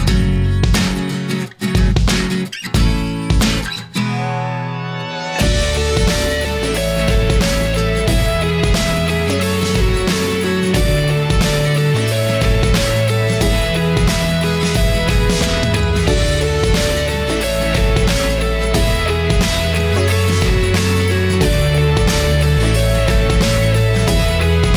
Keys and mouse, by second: 3.5-4.6 middle drag, 5.2 KP_1, 6.7 middle click, 14.7-15.8 middle drag, 16.6 middle click, 18.0-22.7 drag, 22.9 click.